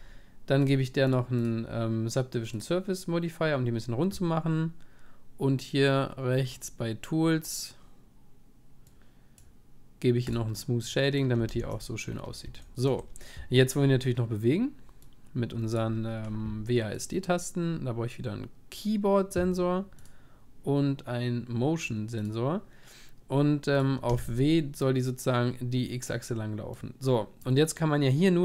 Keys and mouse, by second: 2.6-5.0 drag, 8.9-12.1 drag, 11.5 ctrl+s, 12.1-14.3 middle drag, 15.1-18.7 drag, 24.3-26.6 drag, 27.4-28.4 drag.